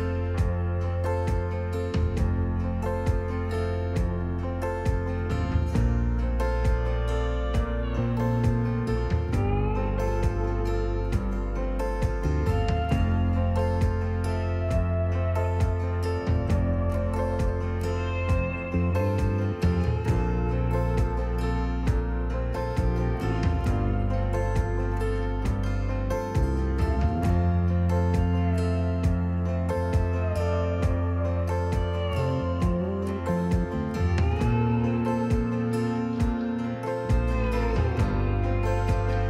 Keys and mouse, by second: 2.3 2, 2.5 F12.